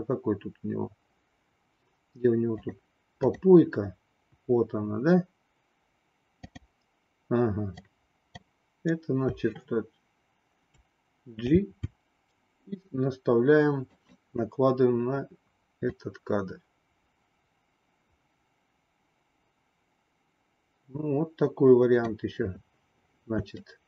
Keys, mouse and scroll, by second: 3.3 click, 6.4 click, 7.8 click, 11.6 g, 15.9-22.2 drag, 23.6 shift+middle click.